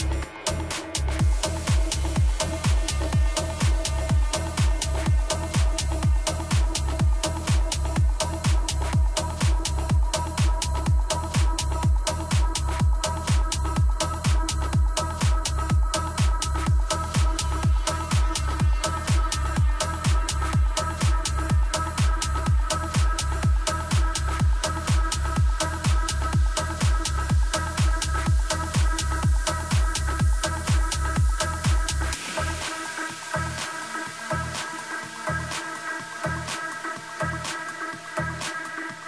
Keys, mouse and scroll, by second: 1.2 ctrl+z, 2.9-6.1 drag, 13.3 a, 13.8 z, 14.4-17.2 middle drag, 19.0-23.3 middle drag, 29.4-32.4 middle drag.